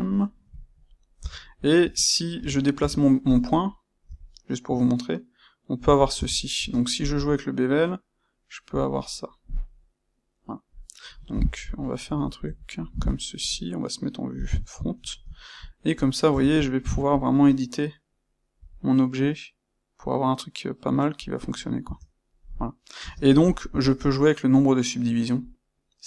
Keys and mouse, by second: 0.1-1.7 middle drag, 1.1 Tab, 1.7 space, 2.3 Escape, 2.7 Tab, 3.2 click, 3.9 c, 5.8 click, 6.1 Tab, 6.5 space, 8.9-15.9 middle drag, 14.3 KP_1, 15.9 click, 16.2 Tab, 16.5 ctrl+middle click, 17.1 click, 18.5 c, 21.3 click, 21.7 Tab, 22.4-26.0 middle drag, 22.9 space.